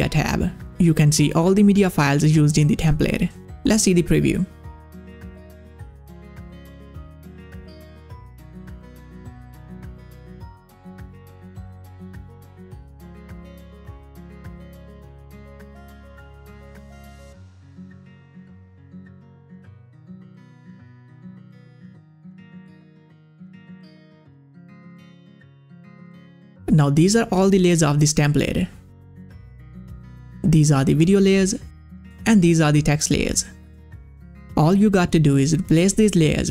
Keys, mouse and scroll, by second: 0.2 click, 4.5 middle click, 4.5 click, 5.0 space, 21.8 space, 23.9-36.5 drag.